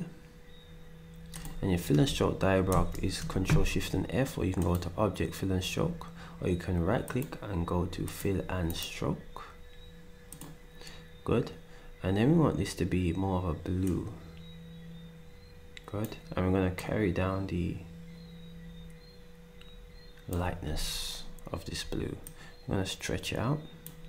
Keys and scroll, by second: 2.7 ctrl+shift+f.